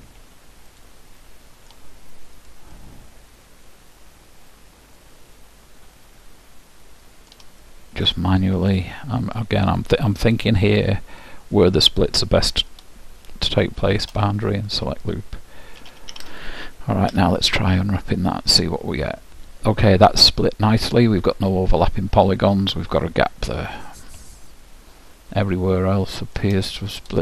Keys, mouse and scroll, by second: 1.0-4.4 drag, 1.4-5.0 middle drag, 7.8-9.6 middle drag, 8.5-13.6 drag, 13.6 shift+', 16.0 a, 16.3 a, 17.4 u, 23.7-26.5 middle drag.